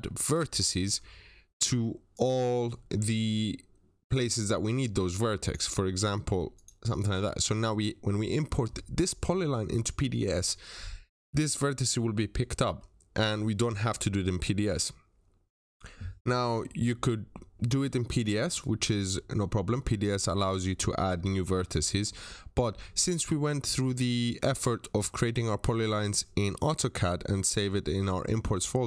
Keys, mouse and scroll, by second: 0.2 click, 0.5 middle click, 1.0 scroll up 1, 2.0 click, 2.3 Escape, 2.7 scroll down 1, 2.8 middle click, 3.9 click, 5.6-6.4 scroll up 1, 6.4 click, 6.9-7.4 scroll down 2, 7.1 middle click, 7.7 middle click, 7.9 scroll down 1, 11.0 scroll up 1, 12.5 scroll down 1, 12.6 middle click.